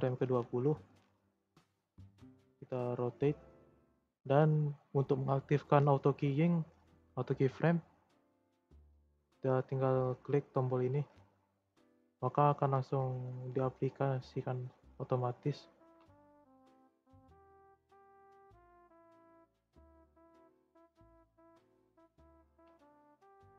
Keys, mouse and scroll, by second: 0.9 scroll up 1, 1.1-4.1 middle drag, 11.7 scroll down 1, 13.2-15.7 shift+middle drag, 15.7 r, 18.7-20.3 drag, 21.0-23.5 drag.